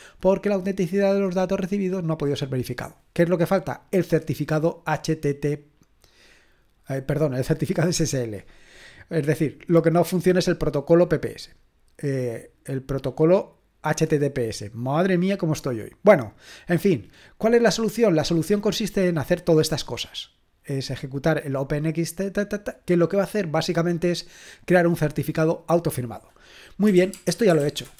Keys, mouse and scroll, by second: 4.9 click, 8.2 scroll down 1, 17.2 scroll down 1, 18.6-20.4 drag, 21.0 click, 21.3 click, 25.7-26.9 drag, 26.7-27.9 typing.